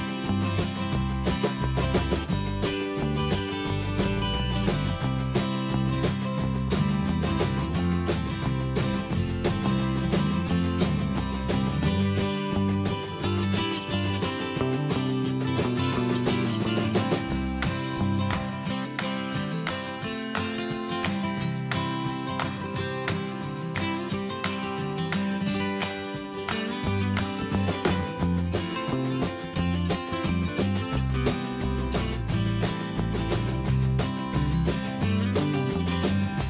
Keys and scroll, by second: 4.5 ctrl+space, 8.3 ctrl+g, 14.1 ctrl+shift+[.